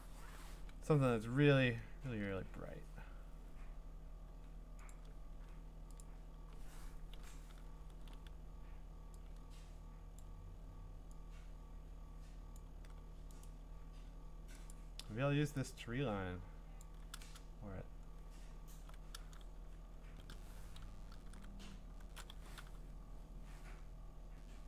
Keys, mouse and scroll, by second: 2.1 Return, 4.9 click, 6.0 click, 7.1 ctrl+i, 10.2 click, 12.5 click, 13.4 right click, 16.2 click, 16.8 click, 17.4-19.1 scroll, 20.0 v, 21.3 alt+shift+d, 22.1-23.1 typing.